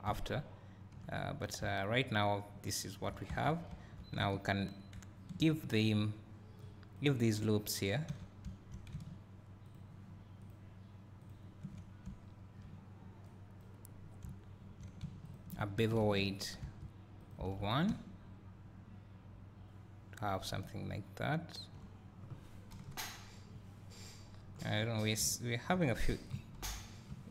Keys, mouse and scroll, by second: 0.0 `, 3.8 2, 4.7 alt+click, 6.8 alt+click, 8.1-9.7 drag, 8.1 w, 13.8 scroll up 1, 13.9 scroll down 2, 14.0 scroll up 1, 14.2 `, 15.3 alt+shift+click, 16.6 ctrl+e, 17.3 click, 17.5 Tab, 17.9 `, 22.0 scroll down 1, 22.7 KP_1, 24.2 scroll up 1, 25.2 `.